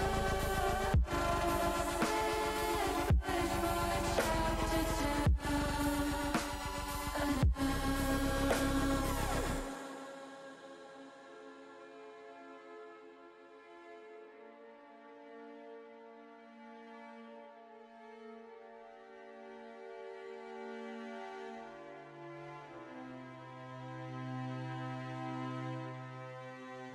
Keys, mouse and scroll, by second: 2.6 middle click, 3.3 middle click, 3.9 u, 5.6 middle click, 7.2-8.4 drag, 8.7-9.8 middle drag, 10.0 middle click, 11.3 middle click, 12.4 middle click, 13.4 middle click, 19.1 click, 21.1 click, 21.5 middle click, 23.0 click, 24.3-25.9 middle drag.